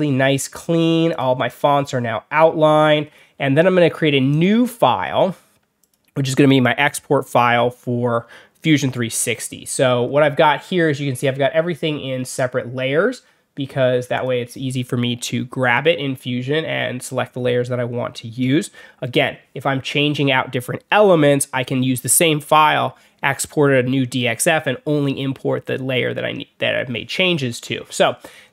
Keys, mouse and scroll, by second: 0.1 alt+scroll up 2, 1.0 click, 1.4 click, 1.8 alt+scroll up 2, 2.3 alt+scroll down 2, 2.3 alt+middle click, 2.8 alt+middle click, 4.2 click, 5.7 click, 9.1 scroll down 2, 9.7 alt+scroll up 2, 10.0 alt+scroll down 2, 10.3 alt+scroll up 2, 10.4 alt+middle click, 14.0 click, 28.0 alt+middle click, 28.1 alt+scroll down 1, 28.3 alt+scroll up 2.